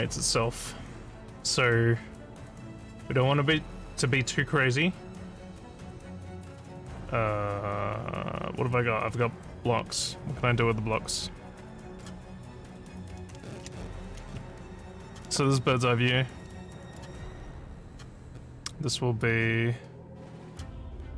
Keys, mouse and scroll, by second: 11.9 click, 15.0 click, 16.9 click, 17.8 click, 19.2-20.5 drag.